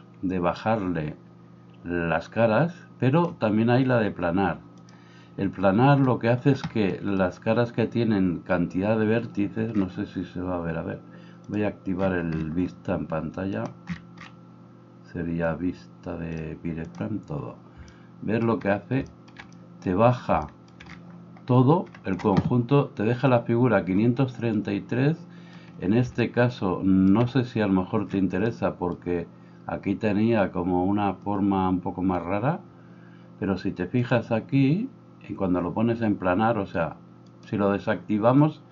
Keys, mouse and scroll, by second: 4.9-11.5 middle drag, 11.5 click, 11.7-13.6 middle drag, 13.6-16.5 drag, 16.5 middle click, 16.9 click, 17.1-22.2 middle drag, 22.2-34.2 drag, 34.2-37.3 middle drag, 37.3-38.7 drag.